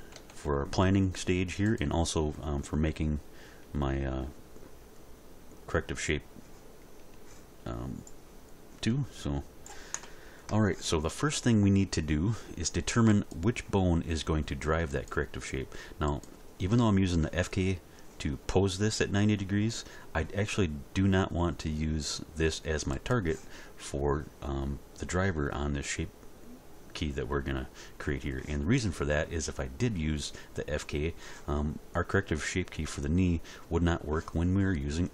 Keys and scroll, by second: 0.2 3.